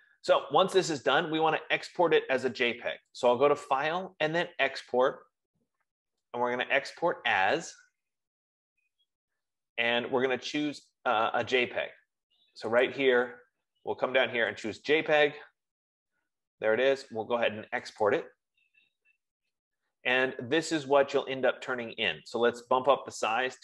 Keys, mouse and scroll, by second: 4.2 click, 8.5 click, 15.2 click, 18.8 click, 23.5 click.